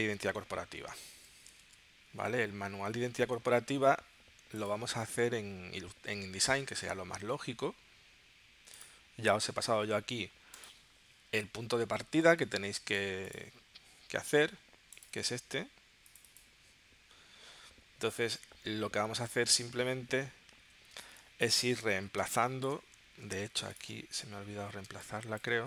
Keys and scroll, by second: 1.1 super+w, 1.7 super+Tab, 2.9 super+q, 21.0 space, 22.2 space, 24.0 space, 24.8 space.